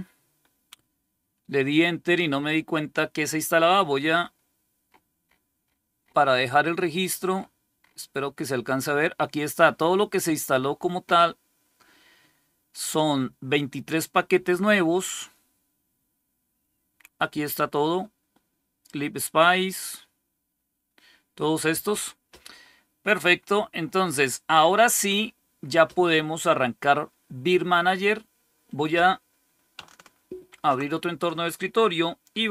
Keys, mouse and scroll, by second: 30.4 super+5.